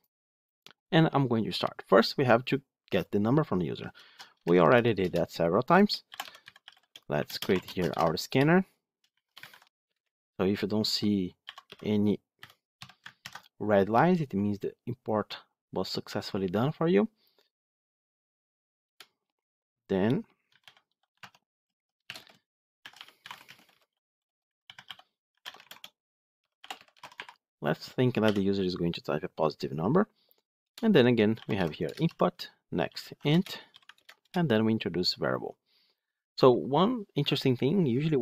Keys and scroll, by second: 3.2 ctrl+v, 4.9 Return, 13.1 Return, 17.1 ctrl+alt+l, 21.1 Tab, 31.8 Return, 33.8 alt+Return.